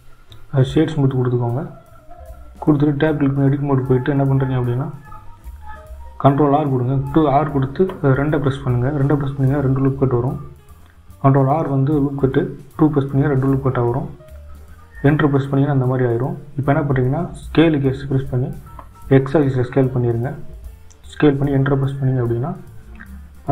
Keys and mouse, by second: 1.6 Tab, 4.6-5.9 drag, 8.3 ctrl+r.